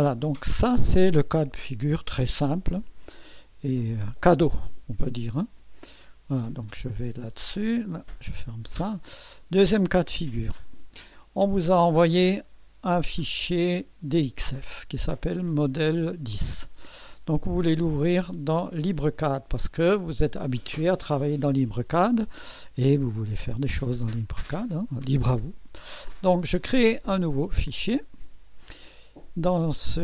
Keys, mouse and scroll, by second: 2.6 click, 5.9 click, 7.0 click, 8.2 click, 13.7 click, 18.0 click, 26.3 click, 27.5 click.